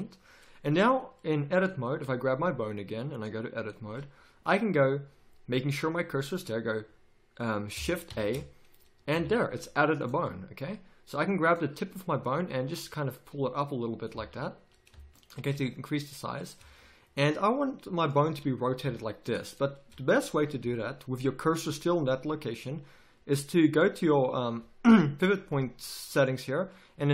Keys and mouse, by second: 8.1 shift+a, 9.1 z, 14.1 z, 16.6 z, 18.8 r, 23.6-27.1 drag.